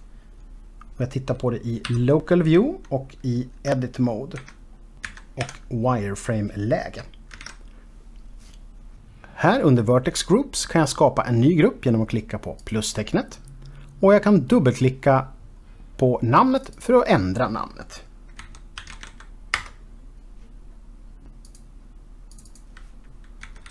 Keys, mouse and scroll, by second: 0.2 KP_Decimal, 2.2 KP_Divide, 3.9 Tab, 4.8-5.8 typing, 7.5 typing, 7.8 alt+a.